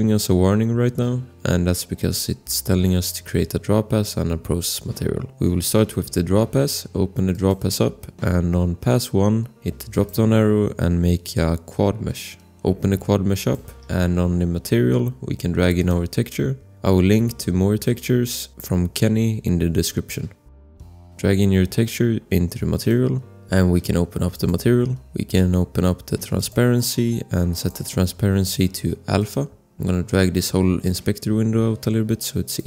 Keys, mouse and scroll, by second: 1.7 scroll, 7.3 click, 10.0 click, 13.3 click, 14.0-14.5 scroll, 20.6 click, 24.3 click, 25.0 scroll, 26.3 click, 27.5 click, 31.1 click.